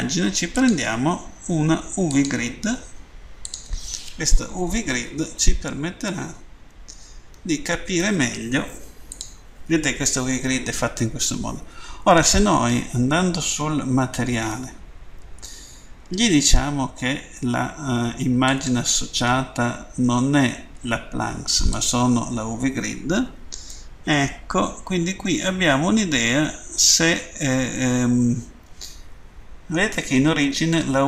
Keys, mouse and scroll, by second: 0.5 click, 2.1 click, 3.5 click, 4.4-5.4 typing, 7.3 Return, 9.1 click, 18.3 click, 21.7 click, 23.7 middle click.